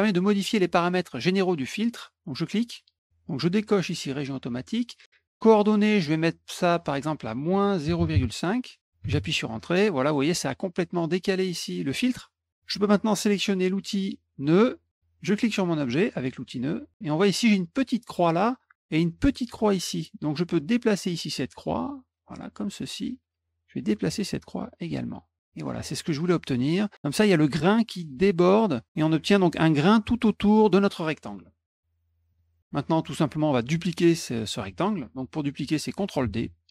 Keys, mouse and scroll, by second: 2.4 click, 3.6 click, 6.8 click, 9.0 Return, 14.4 click, 14.9 click, 16.3 click, 21.3-23.0 drag, 24.1-25.7 drag, 32.3 click.